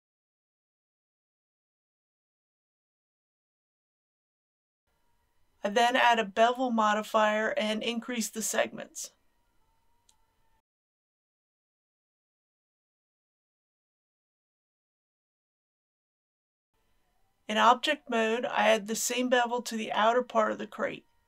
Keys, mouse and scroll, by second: 2.0 KP_Decimal, 2.1 KP_0, 2.4 KP_5, 4.5 click, 9.8 KP_5, 12.8 click, 13.4 KP_Decimal, 13.6 KP_0, 13.8 KP_1, 16.3 click, 17.0 Tab, 19.5 click.